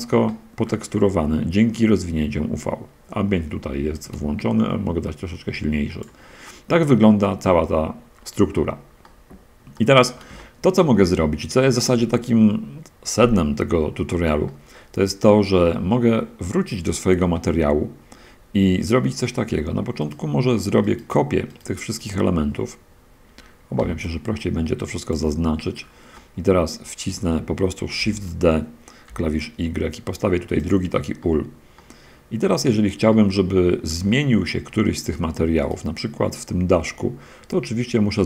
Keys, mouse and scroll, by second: 0.2 middle click, 0.8-1.4 scroll down 1, 4.0-6.5 drag, 6.8 shift+middle click, 7.7 middle click, 7.9 click, 8.5-10.6 drag, 10.8 shift+click, 14.4-15.9 drag, 16.5 middle click, 17.4-18.6 drag, 19.2 middle click, 20.4 shift+click, 21.2 shift+click, 21.8 shift+click, 24.1 b, 24.4-25.6 drag, 26.1 scroll down 1, 26.4-27.3 middle drag, 27.3-27.6 drag, 27.9 shift+d, 29.4 y, 31.5-31.8 drag, 31.8 middle drag, 32.2 middle drag, 32.4-33.0 scroll up 1, 33.4 middle click, 34.2 shift+middle click, 35.2 shift+scroll down 2, 36.0 middle click.